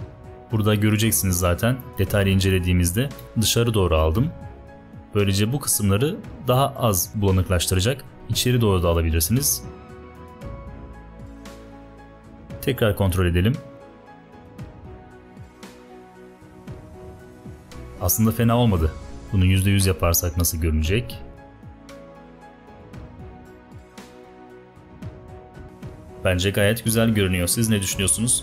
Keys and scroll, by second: 0.2 shift+Up, 2.1 ~, 3.1 Escape, 8.1 Down, 9.9 shift+Up, 10.1 shift+Up, 10.4 shift+Up, 12.1 Return, 13.7 space, 14.4 ~, 16.9 space, 18.9 ~, 19.1 space, 20.8 ~, 25.8 space.